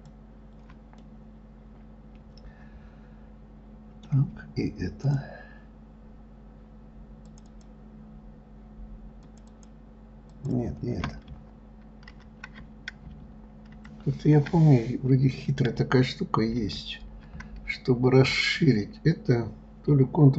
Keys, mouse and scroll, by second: 0.1 shift+click, 0.3 shift+click, 1.4-4.3 middle drag, 5.4 shift+click, 7.7 shift+click, 7.9 shift+click, 9.6 shift+click, 9.9 shift+click, 10.7 shift+click.